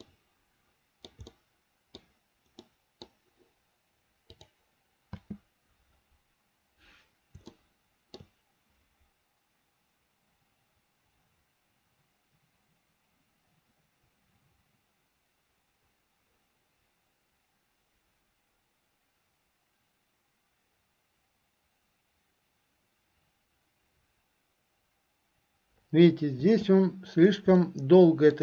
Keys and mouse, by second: 0.2-1.3 shift+middle drag, 1.5 middle click, 2.8 middle click, 5.4 space, 7.7 shift+middle click, 26.6 space, 27.9 middle click.